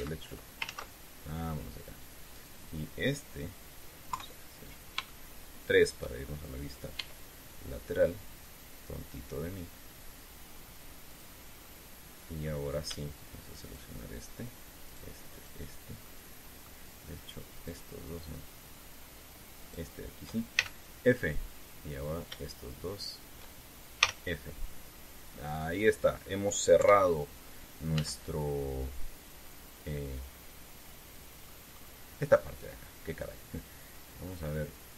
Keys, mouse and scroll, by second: 1.4 ctrl+z, 3.1 right click, 4.8 KP_3, 5.8 shift+middle click, 7.7 e, 11.8 click, 12.4-13.4 middle drag, 14.4 shift+right click, 15.6 shift+right click, 16.0 shift+right click, 16.8 shift+middle click, 18.3 shift+right click, 18.8 shift+right click, 20.4 shift+right click, 21.3 shift+f, 22.8 shift+right click, 23.6 shift+right click, 24.8 f, 25.6-26.3 scroll down 4, 27.5 KP_3, 28.7 z, 31.0-32.2 scroll down 6, 34.0 scroll down 2.